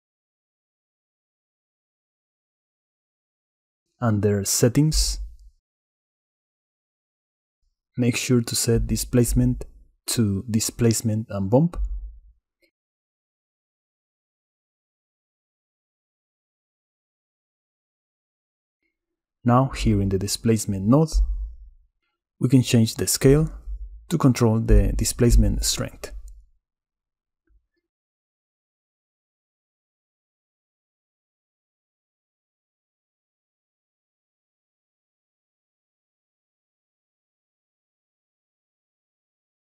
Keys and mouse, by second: 2.3 click, 3.5 click, 6.6 click, 10.8-13.5 drag, 16.3 middle click, 18.7 middle click, 20.2 middle click, 21.7 middle click, 26.7 click, 29.2-34.3 shift+drag, 34.6 middle click, 35.2 middle click, 36.1 middle click, 36.7 middle click, 37.8-39.6 drag.